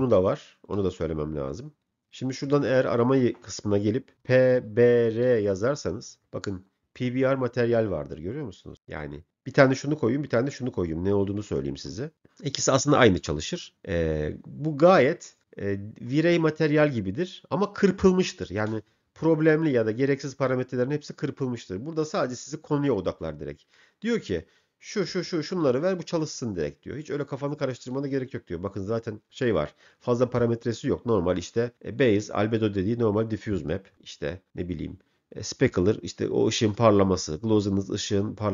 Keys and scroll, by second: 4.1 p, 5.3 r.